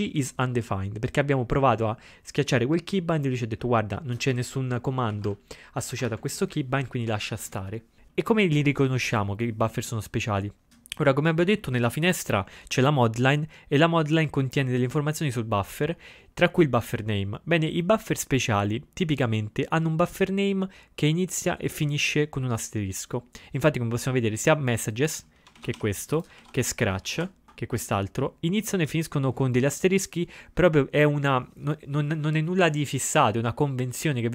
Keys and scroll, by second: 5.1 ctrl+x, 5.2 ctrl+-, 5.9 ctrl+x, 6.0 ctrl+-, 25.6 ctrl+x, 25.8-28.0 typing.